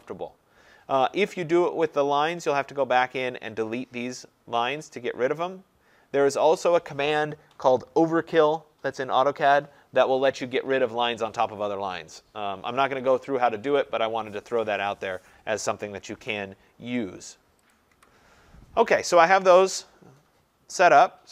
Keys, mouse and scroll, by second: 3.8-8.9 drag, 16.2 Delete, 17.8 click, 18.0 Delete.